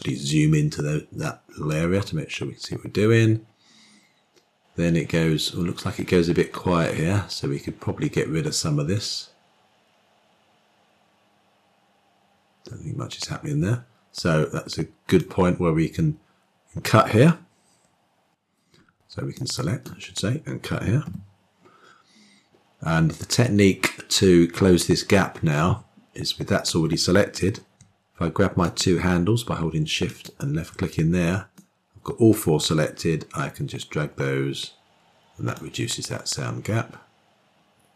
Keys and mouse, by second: 1.7-15.1 drag, 19.2-19.7 drag, 21.1 k, 31.4-35.4 drag.